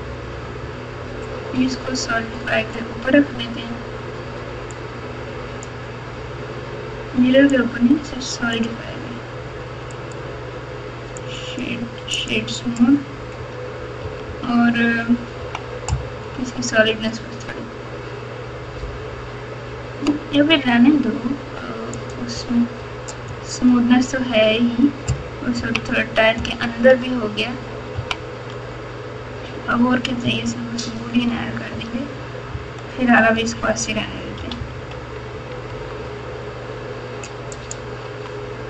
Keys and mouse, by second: 4.7-5.6 drag, 7.5-8.5 drag, 10.0-12.3 right drag, 14.0 KP_6, 14.2 KP_6, 15.3 KP_4, 21.9 click, 25.5 KP_6, 26.3 KP_Add, 26.8 KP_Add, 26.9 KP_Add, 27.0 KP_Add, 27.9 KP_3, 30.4 ctrl+KP_4, 30.9 ctrl+KP_4, 31.0 ctrl+KP_4, 31.7 KP_4, 32.5 KP_Subtract, 33.0 KP_Subtract, 33.1 KP_Subtract, 33.1 KP_Subtract, 34.3 KP_Subtract, 34.6 KP_Subtract, 34.7 KP_Subtract, 35.6 Tab, 38.0 Tab.